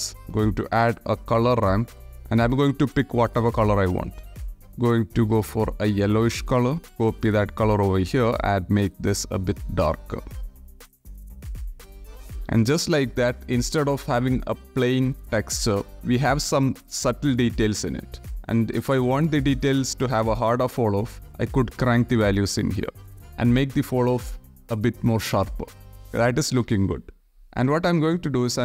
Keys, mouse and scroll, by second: 0.1 BackSpace, 2.6 shift+drag, 2.8 shift+middle click, 5.4 click, 6.9 ctrl+c, 7.0 ctrl+v, 11.8 click, 19.9-20.4 drag, 20.6-21.1 drag, 22.0 click, 22.7 click.